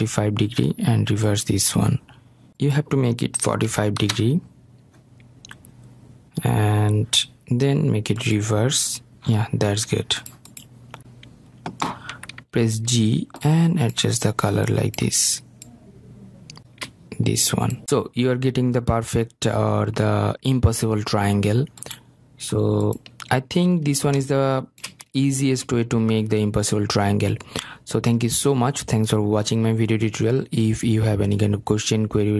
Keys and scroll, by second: 0.3 Return, 4.8 Return, 11.0 Return, 13.6 g.